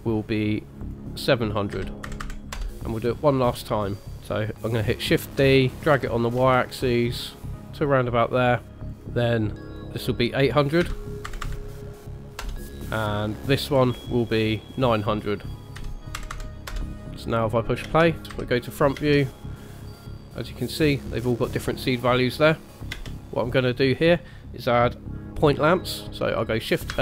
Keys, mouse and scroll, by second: 0.8 click, 2.2 KP_0, 4.0 middle click, 4.0 shift+g, 5.2 shift+d, 8.2 middle click, 8.9 click, 9.6 click, 9.8 click, 11.4 KP_0, 13.5 click, 14.8 click, 16.3 KP_0, 17.3-17.6 scroll up 2, 17.9 space, 18.2 space, 18.6 KP_1, 19.0 space, 19.7 scroll up 1, 22.9 space, 26.9 shift+a.